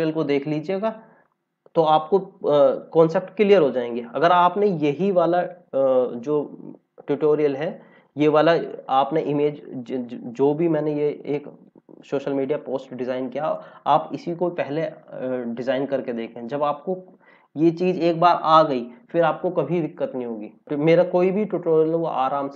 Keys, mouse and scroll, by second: 11.6 click.